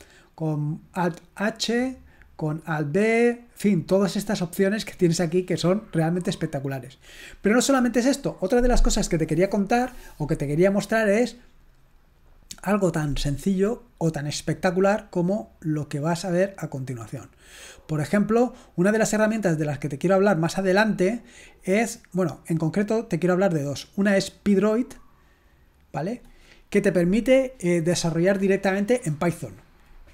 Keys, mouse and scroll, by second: 3.8-4.7 scroll down 2, 11.8 click, 13.6 right click, 16.8 click, 18.4-20.3 scroll down 2, 21.5 scroll down 1, 24.7 click, 26.2 click.